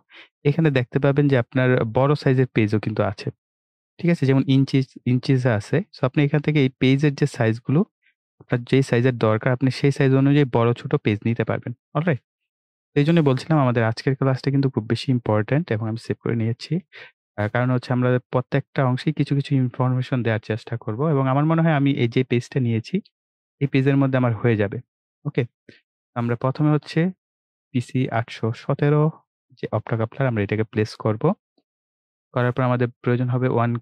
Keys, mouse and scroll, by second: 7.0-12.0 scroll down 1, 12.0 click, 15.6 ctrl+s, 16.9-22.9 drag, 22.9-23.7 scroll down 1, 23.7-24.1 scroll up 1, 25.3-30.3 drag.